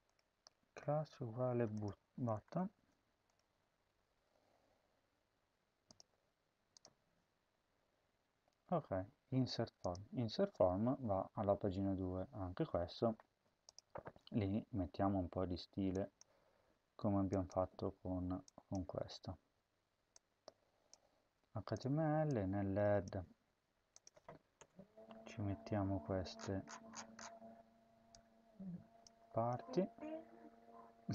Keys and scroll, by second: 2.1 BackSpace, 2.7 space, 3.5 ctrl+s, 23.1 ctrl+c, 24.5 Return, 24.7 Home, 25.1 ctrl+v, 29.1 ctrl+c.